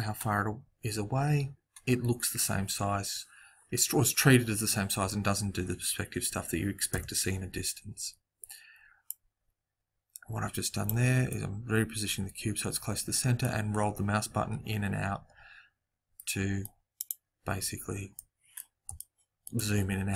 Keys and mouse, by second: 6.9 KP_7, 8.0-9.1 middle drag, 9.1 click, 14.4 middle click, 16.9 click.